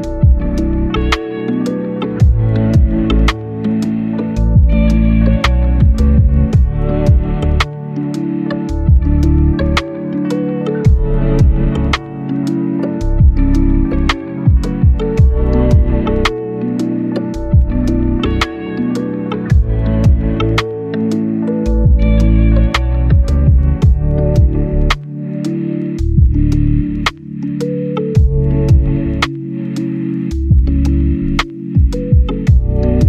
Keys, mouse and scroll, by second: 0.1 scroll down 1, 0.2 right click, 1.3 click, 1.8 right click, 2.2 scroll up 1, 2.3 right click, 3.5 scroll down 1, 3.6 right click, 4.2 scroll up 1, 4.3 right click, 5.0 click, 5.4 right click, 7.2 scroll up 1, 7.7 scroll down 1, 7.8-8.7 scroll up 2, 7.9 right click, 8.7 click, 9.9 right click, 10.6 click, 11.5 right click, 12.6 click, 13.1 right click, 14.0-14.7 scroll up 1, 14.7 right click, 15.1 scroll down 1, 15.3 scroll up 1, 15.4 right click, 16.0 scroll down 1, 16.1-16.7 scroll up 1, 16.7 click, 17.1 right click, 17.4-17.9 scroll up 1, 17.9 click, 18.4 right click, 19.0 click, 19.7-20.0 scroll down 1, 20.0 click, 20.2 right click, 20.9 click, 21.9 right click, 22.3-23.0 scroll up 1, 23.0 scroll down 1, 23.2 scroll up 1, 23.2 right click, 23.4 scroll down 1, 23.5 scroll up 1, 23.8 scroll down 1, 24.0-24.6 scroll up 1, 24.6 click, 25.2-25.9 scroll up 1, 26.1 click, 29.6 right click, 30.3 click, 31.3-32.3 right drag, 32.7 click.